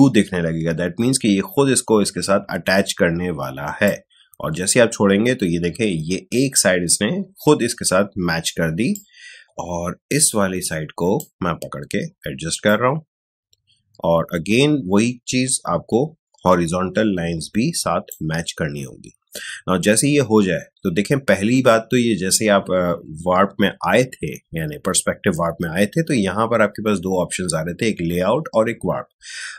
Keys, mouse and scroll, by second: 8.9-20.6 drag.